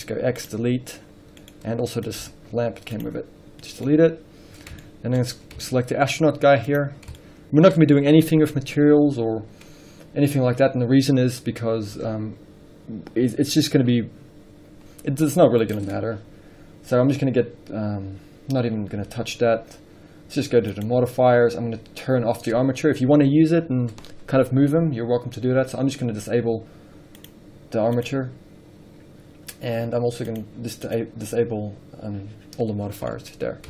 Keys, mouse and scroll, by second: 0.9 x, 1.1-1.7 scroll down 1, 1.7 middle drag, 1.9-2.4 scroll up 1, 2.4 click, 3.9-7.1 middle drag, 4.1-4.7 scroll up 2, 4.7-5.0 scroll up 1, 5.4-5.9 scroll up 2, 6.3-7.1 scroll up 2, 7.1 click, 7.7-27.8 middle drag, 27.8 click, 28.1 click, 30.5 click, 31.1 click, 33.0-33.3 scroll down 1, 33.3-33.6 middle drag.